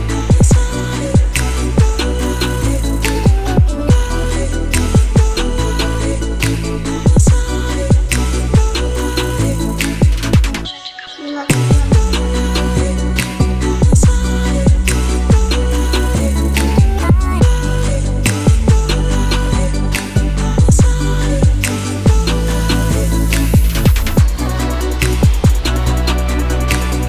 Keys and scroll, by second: 10.6-13.0 typing, 15.8 BackSpace.